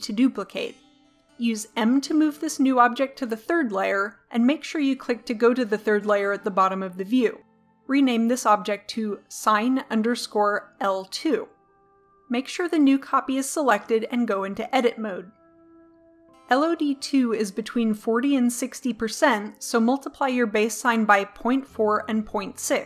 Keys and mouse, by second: 1.8 m, 6.9-7.6 drag, 8.7-10.5 drag, 12.9 click, 14.4 Tab.